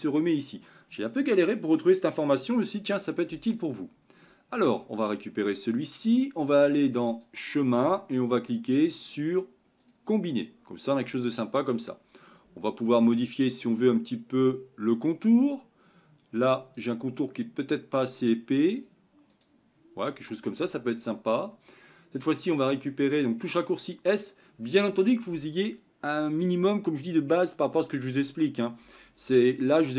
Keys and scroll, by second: 24.4 s.